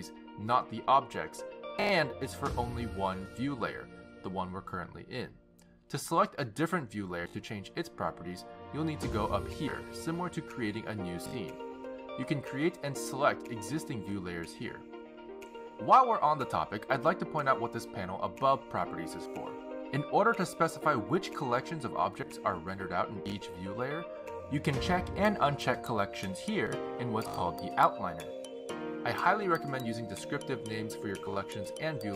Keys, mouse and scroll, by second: 0.1 click, 0.4 click, 1.3 click, 1.7 click, 10.3 click, 12.4 click, 14.3 click, 15.5 click, 23.0 click, 25.0 click, 25.8 click, 26.9 click, 28.6 click, 29.6 click, 30.9 click, 31.1 click.